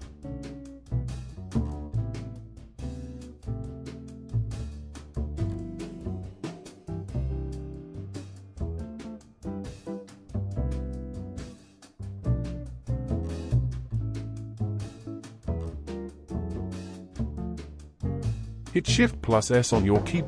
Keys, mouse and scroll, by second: 1.5 space, 2.9-3.8 drag, 5.1 ctrl+s, 5.4 scroll up 4, 5.7-6.2 shift+middle drag, 6.2 click, 6.4 space, 9.0 space, 9.8-14.5 middle drag, 14.5-14.9 scroll down 1, 14.9 ctrl+s, 15.3-15.8 scroll down 3, 15.8-16.8 shift+middle drag, 16.8 n, 18.0 click, 18.7 shift+s.